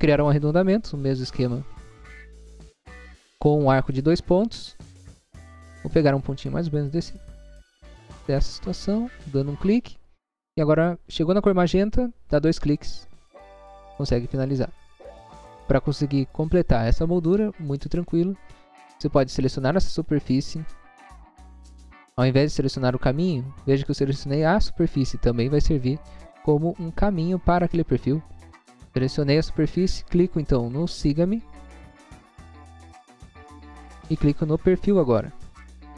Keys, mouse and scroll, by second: 1.4 click, 4.0 click, 8.2 click, 12.7 click, 12.8 click, 14.2 scroll down 1, 14.5 space, 14.9 scroll down 1, 15.4 scroll down 1, 16.0 scroll down 1, 19.3 click, 30.7 click, 33.6 scroll up 1, 35.7 click.